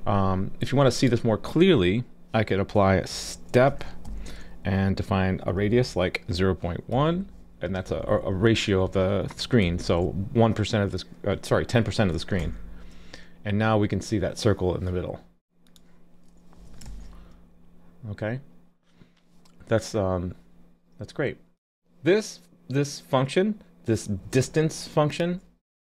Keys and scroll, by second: 12.4 super+s, 16.9 super+s.